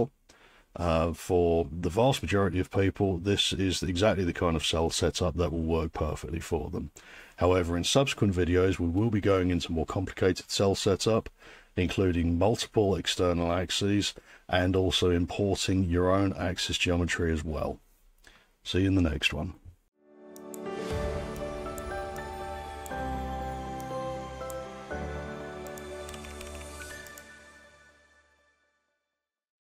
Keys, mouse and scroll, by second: 19.9 alt+2.